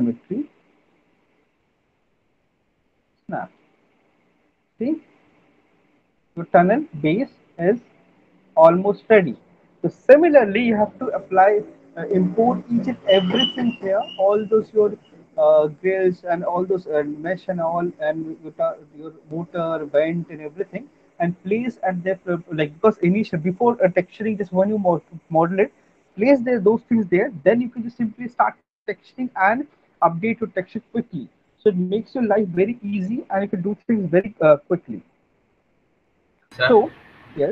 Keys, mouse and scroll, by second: 3.1 click, 3.9 alt+right click, 4.8 click, 9.1 alt+click.